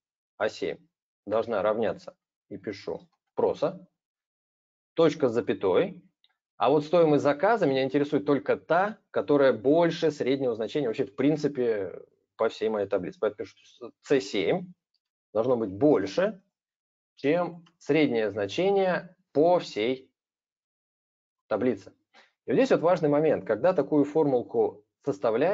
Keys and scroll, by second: 14.7 super+space, 15.6 super+space.